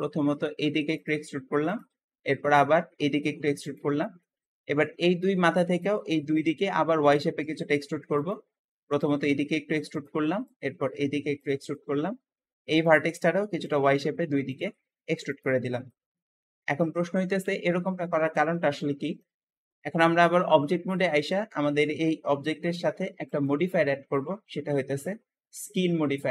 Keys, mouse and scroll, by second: 1.5 click, 2.5 e, 3.8-7.3 shift+middle drag, 7.3 Escape, 8.0 click, 8.6 e, 10.3 click, 10.6 e, 11.6-12.6 middle drag, 12.6 shift+click, 12.9 e, 14.4 click, 14.6 e, 15.7 middle click, 16.3 scroll down 2, 16.6 shift+middle click, 17.0 Tab, 17.3-19.3 middle drag, 19.3-20.2 scroll up 2, 23.1-26.3 drag.